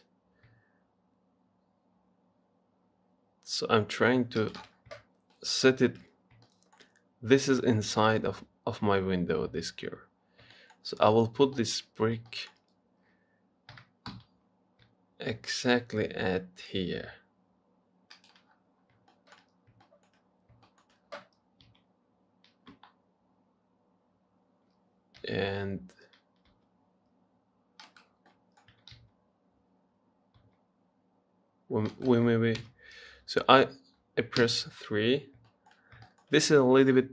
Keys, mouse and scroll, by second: 5.0-5.5 scroll up 1, 5.5 shift+middle click, 6.0-6.5 shift+scroll up 5, 6.7-10.0 shift+middle drag, 10.4 scroll up 2, 10.8 shift+middle click, 11.2 scroll down 1, 11.8 shift+middle click, 12.2-12.5 scroll up 1, 12.5-14.0 shift+middle drag, 14.0 g, 18.7-19.3 scroll down 8, 19.3 shift+middle click, 19.7-20.1 scroll up 1, 20.1 shift+middle click, 20.6 scroll up 1, 20.9 shift+middle click, 21.6 scroll down 2, 21.9 s, 28.5 middle click, 28.9 s, 32.8 KP_1, 33.8-34.6 scroll up 3, 34.6 KP_3, 35.7 shift+middle click, 36.0 scroll up 3, 36.3-37.1 shift+middle drag.